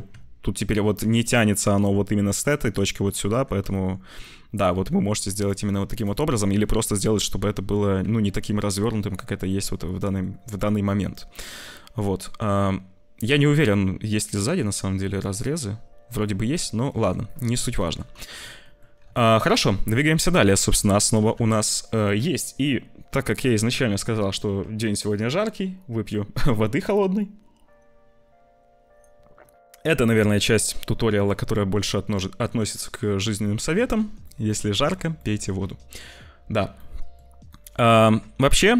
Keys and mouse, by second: 0.0 Tab, 3.3 click, 3.7 shift+click, 4.3 shift+click, 5.3 click, 6.6 click, 7.4 j, 7.9 Tab, 8.5 click, 9.4 middle click, 10.5-13.1 middle drag, 16.6 click, 16.8 Tab, 17.3 Tab, 17.7 ctrl+s, 18.1 shift+click, 18.5 click, 19.0 ctrl+s, 21.1 /, 33.4 click, 33.8 ctrl+s, 34.2 click, 34.6 shift+middle click, 35.1 middle click, 36.7 middle click, 37.4 middle click.